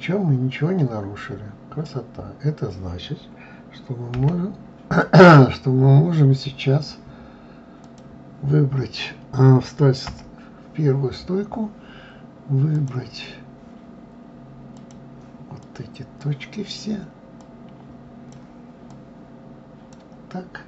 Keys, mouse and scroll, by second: 4.1 Delete, 7.8 click, 10.0 KP_1, 12.7-14.9 drag, 17.4-18.9 drag.